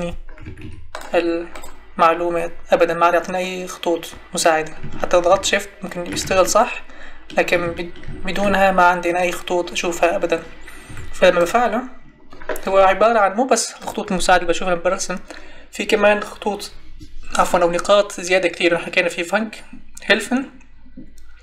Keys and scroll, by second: 0.4 Escape, 10.8 Escape.